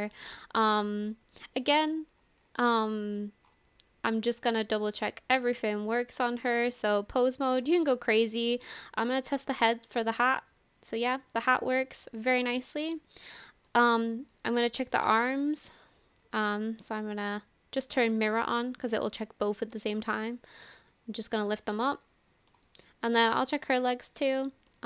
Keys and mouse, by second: 0.2 shift+middle click, 4.4 drag, 5.6 click, 6.5 click, 8.1 shift+middle drag, 8.2 shift+right click, 9.4-12.5 drag, 14.0 ctrl+shift+z, 14.0 shift+middle click, 14.8 click, 20.1-22.2 shift+drag, 22.6 shift+middle click.